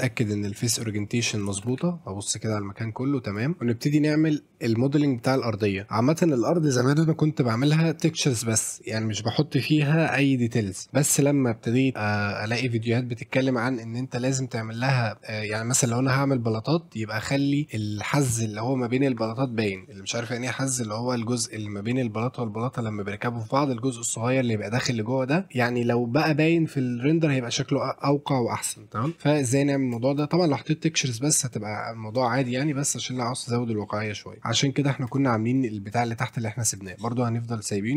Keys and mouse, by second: 1.6 shift+f, 1.8-2.6 a, 2.8 a, 3.3 click, 3.6 s, 29.5 middle drag, 33.8-34.3 middle drag, 34.4 middle click, 34.7 middle drag, 35.1 click, 35.5-36.9 drag.